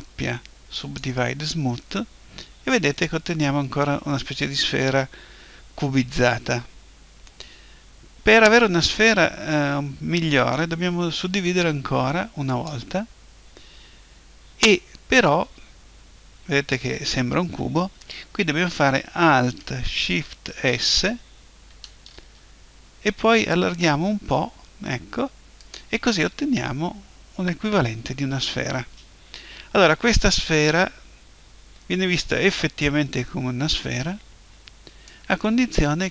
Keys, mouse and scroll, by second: 11.3 w, 20.5 alt+shift+s, 25.8-27.7 drag, 27.7 middle click, 31.2-33.8 middle drag, 35.1-36.1 drag.